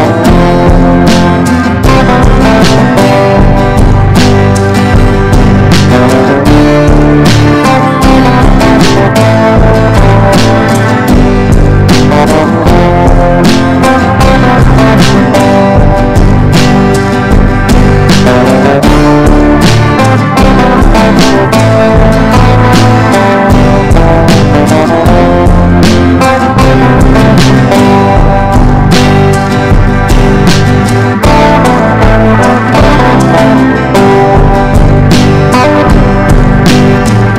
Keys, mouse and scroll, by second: 6.4 Down, 6.5 Down, 6.7 Down, 7.2 click, 11.3-14.3 ctrl+drag, 15.4 right click, 15.8-27.2 drag, 29.2 Down, 29.4 Down, 29.7 click, 32.4 ctrl+g, 32.8 click, 33.8 ctrl+d, 34.0 click, 35.7 ctrl+d, 35.9 ctrl+d, 36.2 ctrl+d, 36.6 click, 37.2 shift+click.